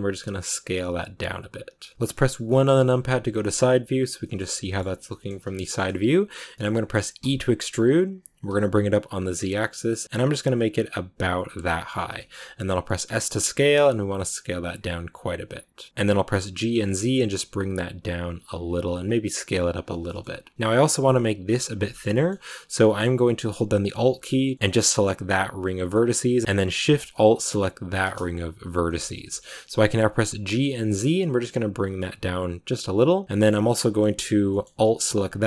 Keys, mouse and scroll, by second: 1.9 middle click, 2.3 KP_1, 3.3 shift+middle click, 4.3 scroll down 3, 4.5-7.1 shift+middle drag, 7.1 e, 11.7-12.1 scroll down 2, 12.1 shift+middle click, 12.2 shift+scroll up 2, 12.5 s, 16.4 g, 18.8 s, 20.0 shift+middle click, 20.5-21.8 scroll down 1, 21.8-26.4 shift+middle drag, 26.4 ctrl+z, 27.8 alt+shift+right click, 28.8-30.4 shift+middle drag, 30.4 g, 33.2-35.2 middle drag, 35.2 alt+right click.